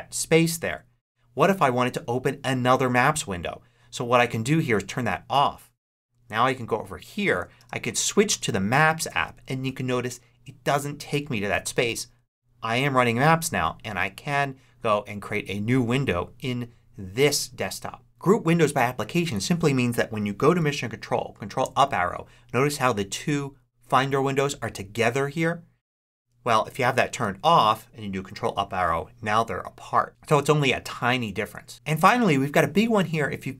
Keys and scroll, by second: 6.1 ctrl+Right, 7.5 super+Tab, 21.5 ctrl+Up, 26.3 Escape, 28.1 ctrl+Up.